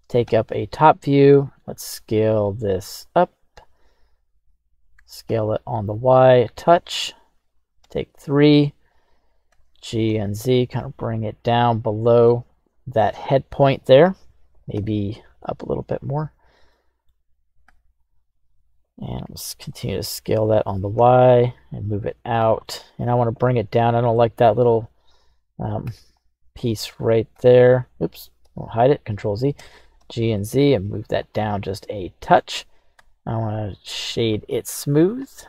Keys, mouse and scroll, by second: 0.2 Return, 0.2 KP_7, 1.3 s, 2.9 click, 4.2-4.9 scroll down 2, 4.9 s, 5.2 y, 6.7 click, 7.8 KP_3, 9.4 g, 10.1 z, 11.5-12.3 drag, 12.3-13.0 middle drag, 14.7 g, 15.1 z, 16.0 click, 16.7 middle click, 17.6 KP_7, 19.2 s, 19.6 y, 20.5 click, 20.9 g, 21.1 y, 22.3 click, 22.6 scroll down 1, 22.6-23.1 middle drag, 23.7-24.0 scroll up 2, 24.1-24.4 middle drag, 25.1 right click, 25.8 h, 26.7 right click, 27.3 h, 28.4 ctrl+z, 29.6 g, 30.0 z, 31.2 click, 31.7 middle click, 32.9 q, 35.1 click.